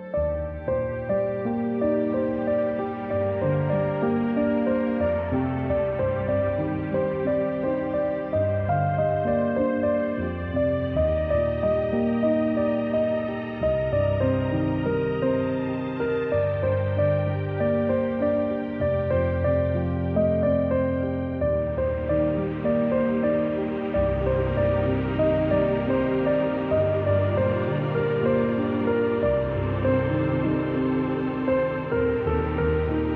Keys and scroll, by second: 3.5-6.6 typing, 9.2 v, 12.3 z, 12.7 space, 13.0 v, 16.4 a, 19.5 v, 20.6 space, 20.9 space, 21.0 z, 21.4 space, 23.4 space, 23.7 space, 23.8 v, 27.2 a.